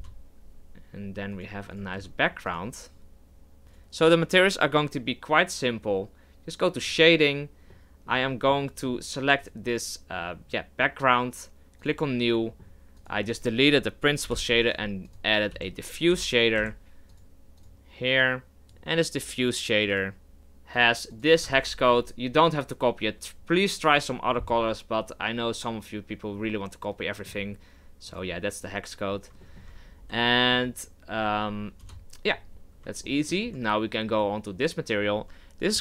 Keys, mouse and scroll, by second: 1.3 right click, 1.7 right click, 1.9 s, 3.7 right click, 6.8 drag, 7.7-9.4 middle drag, 9.4 right click, 11.9-13.0 drag, 14.3 Delete, 14.6 shift+a, 18.8-21.8 drag, 25.8-29.1 middle drag, 29.1 click, 29.4-29.8 shift+middle drag, 29.8-30.2 scroll up 4, 30.2-31.8 shift+middle drag, 31.8 KP_0, 32.5-33.0 scroll up 2, 33.0-34.1 shift+middle drag, 34.1 right click.